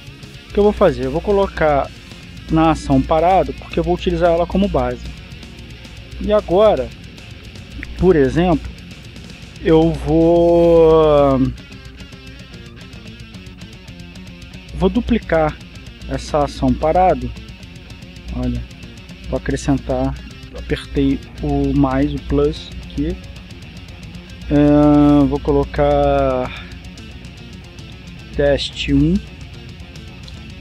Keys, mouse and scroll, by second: 0.2 click, 1.9 click, 3.1 click, 3.9 click, 7.7-9.4 drag, 14.1 click, 15.7 click, 18.0 click, 19.8 click, 24.5 click, 28.5-30.1 typing.